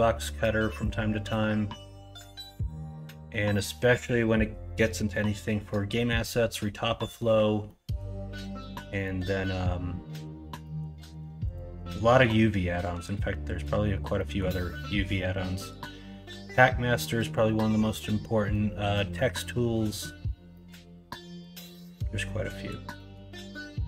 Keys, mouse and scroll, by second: 0.8-2.2 middle drag, 2.6-3.0 middle drag, 7.6-7.9 middle drag, 8.4 middle drag, 9.0 middle click, 10.2 Tab, 10.6 middle click, 13.1-14.1 drag, 14.1 scroll up 1, 14.3 scroll down 1, 18.5 scroll up 1, 18.8 scroll down 1, 20.5 scroll up 1, 20.7-21.4 scroll down 1, 21.4-22.7 scroll down 1, 22.7 scroll down 1, 22.9 scroll up 1, 23.1 scroll down 1, 23.4 Tab.